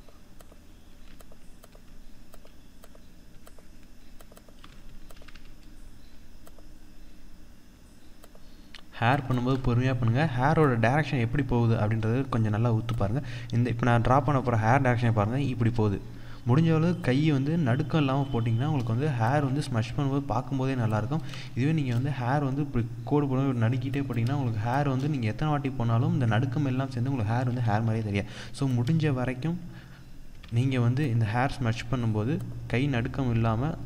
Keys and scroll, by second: 8.9 ctrl+=, 9.0 ctrl+space, 18.9 ctrl+z, 26.9 ctrl+z.